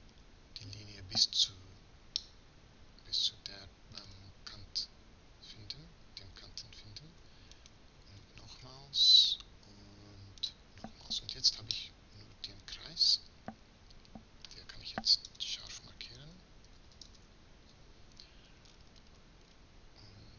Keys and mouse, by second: 3.3-7.3 middle drag, 7.3-8.4 right drag, 8.4 middle click, 10.2-11.7 middle drag, 13.5-15.1 middle drag, 18.4-20.3 middle drag.